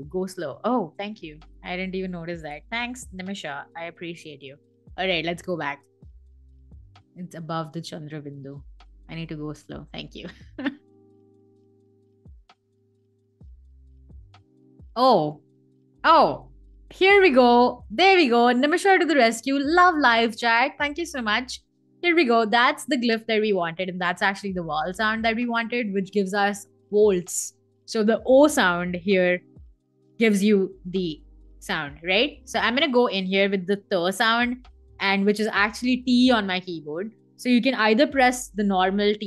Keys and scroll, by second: 2.2 BackSpace, 3.2 a, 34.0 BackSpace, 35.1 t, 37.4 BackSpace, 38.2 t.